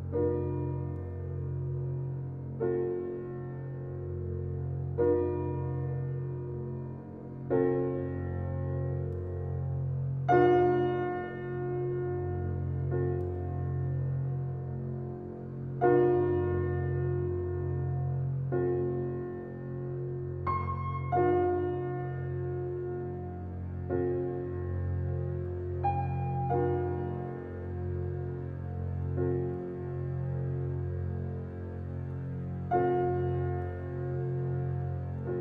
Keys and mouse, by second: 0.3 click, 1.4 click, 4.0 click, 4.7-5.9 drag, 6.3 click, 7.4 shift+a, 9.1 s, 14.3 click, 15.4-19.2 drag, 20.6 click, 21.7 g, 23.9 click, 27.1-27.6 drag, 30.6 g, 33.0 click, 34.5 click.